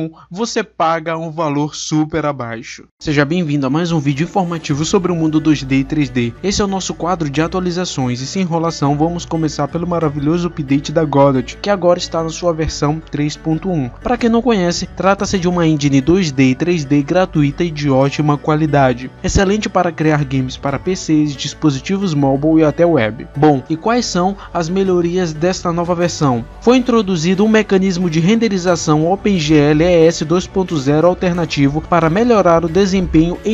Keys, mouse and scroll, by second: 0.0 scroll down 2, 0.0 middle click, 0.1 click, 0.2 middle click, 0.2 click, 0.4 shift+middle click, 0.6 scroll up 2.